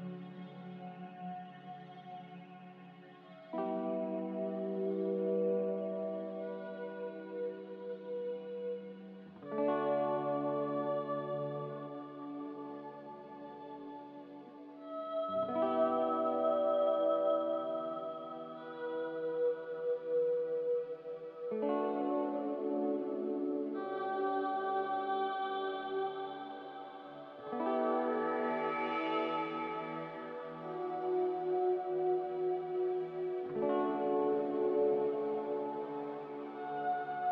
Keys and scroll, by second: 0.1 Delete, 1.1 ctrl+z, 5.1 ctrl+z, 5.6 ctrl+z, 11.2 g, 13.0-13.8 typing, 16.7 Escape, 18.3 Return, 20.3 Escape, 21.3 Delete, 21.3 z, 22.3 m, 26.2 a, 26.8 ctrl+c, 29.9 m, 31.5 a, 33.8 ctrl+c, 36.9 ctrl+v.